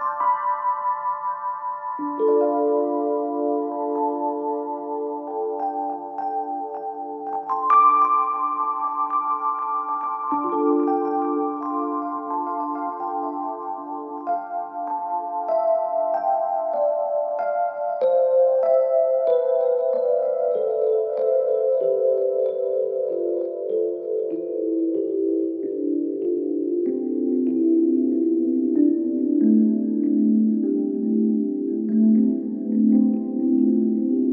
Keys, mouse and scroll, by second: 2.7-3.9 alt+drag, 4.8 t, 5.1 click, 6.0 Home, 6.7 shift+End, 7.8 shift+s, 9.2 BackSpace, 10.3-13.5 typing, 13.1 click, 15.4 click, 15.9 ctrl+t, 16.8-21.1 drag, 22.9-24.1 alt+drag, 27.0-28.6 typing, 29.2 Caps_Lock, 31.8 ctrl+t.